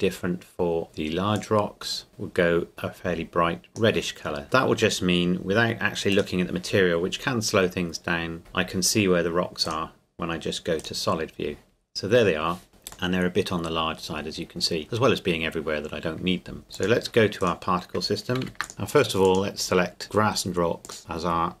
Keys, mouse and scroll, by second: 1.3 click, 6.1 click, 8.4 KP_0, 9.7 click, 13.1 middle click, 14.1 scroll down 1, 14.1 scroll up 1, 14.3-16.6 scroll down 1, 16.6 click, 17.4 right click, 18.4 ctrl+s, 18.6-20.6 drag, 20.8-21.6 drag.